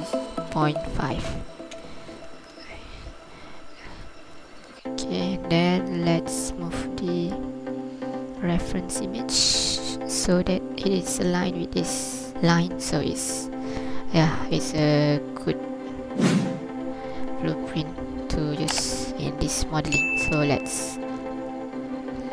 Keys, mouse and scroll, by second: 3.3 scroll up 1, 4.1 ctrl+click, 4.5 scroll up 1, 6.1 g, 10.2 click, 12.3 scroll down 2, 12.6 ctrl+click, 12.7 click, 13.4 scroll down 2, 14.6 right click, 16.9 scroll up 2, 17.2 scroll down 1, 20.4 Tab.